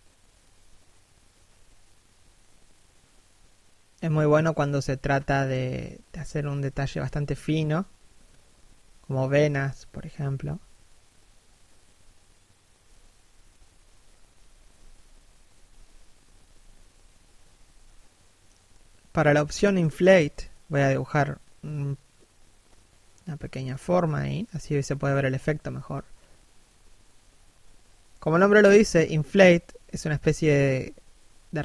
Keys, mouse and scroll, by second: 1.0 click, 1.7 middle click, 5.1 scroll down 1, 5.3 middle click, 5.9 s, 7.1 f, 7.4 click, 10.2 click, 10.9 middle click, 15.2 3, 15.9 1, 17.1 d, 17.8 click, 19.0 click, 19.7 middle click, 22.4 f, 23.0 click, 24.3 middle click, 25.5 s, 25.7 click, 26.9 middle click, 27.5 click, 29.9 f, 30.1 click.